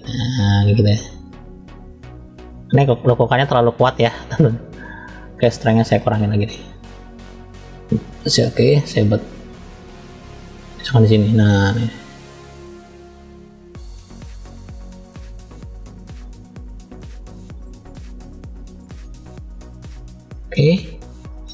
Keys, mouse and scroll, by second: 3.2-3.8 drag, 4.3-5.0 drag, 5.5 click, 7.0 click, 8.1 middle click, 9.4 click, 10.9 middle click, 11.8 click, 13.0 click, 14.1 click, 15.2 click, 16.4-16.8 scroll down 1, 16.8 middle click, 17.5 click, 18.4 click, 19.9 shift+middle click, 21.0 click.